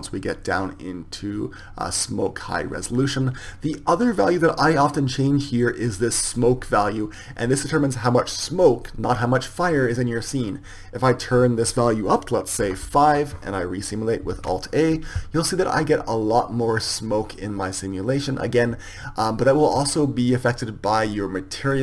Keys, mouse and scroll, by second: 11.8-13.9 drag.